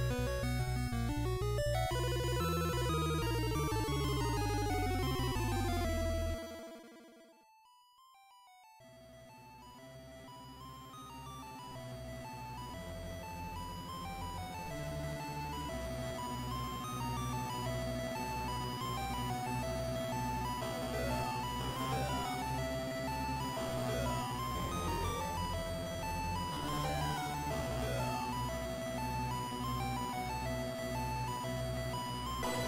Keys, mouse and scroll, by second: 0.1-0.6 scroll down 1, 2.7 click, 4.3 click, 6.7 click, 8.3 click, 10.5 Tab, 11.7 a, 13.3 alt+h, 14.9 a, 15.7 a, 17.7 click, 21.5 middle click, 26.9-27.5 scroll up 2, 28.1-28.9 scroll up 1, 28.9 KP_1, 29.5-29.9 scroll down 2, 31.5 click.